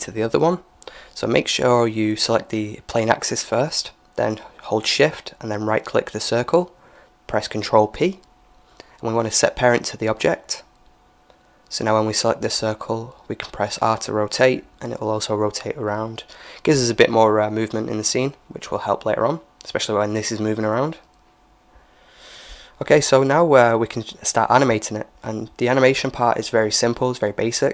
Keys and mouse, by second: 0.7-2.5 drag, 5.7-8.1 right drag, 8.1 ctrl+p, 11.7-13.6 right drag, 13.2 r, 16.8-18.8 right drag, 17.9 g, 20.9-22.9 middle drag, 25.6-27.5 drag.